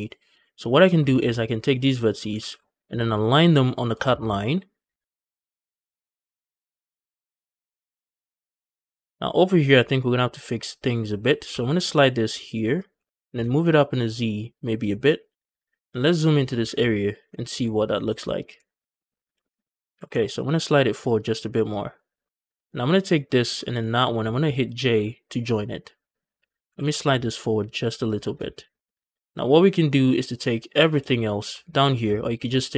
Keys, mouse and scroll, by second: 0.2 shift+middle click, 0.5-0.8 scroll up 1, 0.9 shift+middle click, 1.0 scroll up 1, 1.5 click, 1.8 scroll up 1, 2.1 g, 2.3 g, 5.2 shift+click, 5.4 shift+middle click, 5.7 click, 5.9-8.3 typing, 6.1 shift+click, 6.2 shift+middle click, 6.3 click, 6.7 shift+click, 7.2 shift+click, 7.3 shift+middle click, 7.4 click, 7.8 shift+click, 7.9 shift+middle click, 7.9 scroll up 1, 8.1 click, 8.5 shift+click, 8.7 shift+middle click, 8.7 scroll up 2, 8.9 shift+middle click, 10.1 click, 11.3 g, 11.4 g, 12.6 click, 12.8 g, 13.0 z, 14.6 shift+click, 15.0 scroll up 1, 15.5-16.5 scroll up 6, 16.1 shift+middle click, 16.5 z, 17.1 shift+middle click, 17.4-18.0 scroll up 3, 18.1 shift+middle click, 18.4-18.9 scroll up 1, 18.4 z, 19.0 scroll down 1, 19.3 shift+middle click, 19.8 g, 19.9 g, 21.5 shift+click, 22.9 click, 23.6 shift+click, 24.8 j, 26.2 click, 26.5 g, 26.6 g, 27.9 shift+click, 28.3 scroll down 2, 28.5 shift+middle click, 28.8 a, 29.0 scroll down 1, 29.3-30.2 scroll up 2, 30.2 click, 30.7 scroll down 2, 30.9 shift+middle click, 32.0 alt+click, 32.3 scroll down 1, 32.4 shift+middle click, 32.6 scroll up 1.